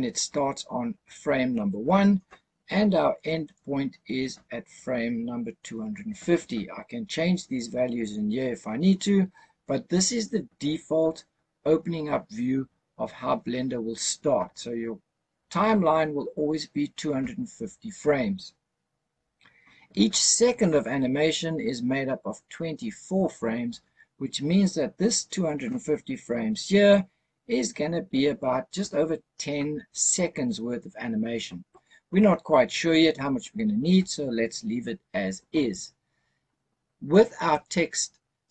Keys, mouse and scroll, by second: 3.3 click, 37.4 click.